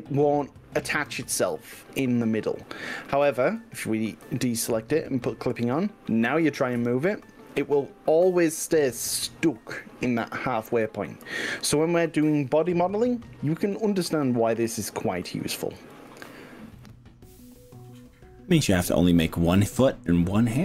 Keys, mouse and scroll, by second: 2.8 click, 3.4 ctrl+z, 5.0 click, 6.8 g, 15.4 click, 16.0 ctrl+z, 16.8-17.2 middle drag, 17.3-17.7 middle drag, 17.9 middle click, 18.6-20.6 middle drag.